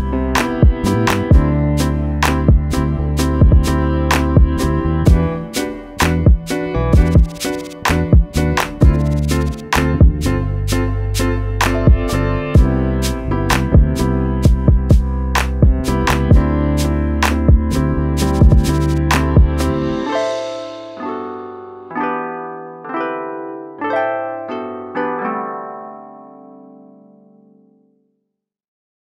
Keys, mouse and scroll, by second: 0.0 scroll up 1, 0.4 click, 2.2-3.1 scroll down 2, 2.4 click, 3.1 click, 5.8 alt+click, 6.6 alt+shift+click, 7.6 click, 8.6 Up, 9.3 click, 14.4 scroll down 1, 15.0 click, 15.4 click, 16.4 click, 17.6 click, 17.9 click, 18.0 scroll up 1, 18.4 click, 18.7 click, 19.4 click, 23.9-24.6 scroll down 3, 25.0 scroll up 1, 25.3 click, 25.8 Down, 26.2 click, 26.3 Up, 26.6 click, 27.0 scroll down 1, 27.6 scroll down 1, 28.0 alt+scroll up 1, 28.9 click.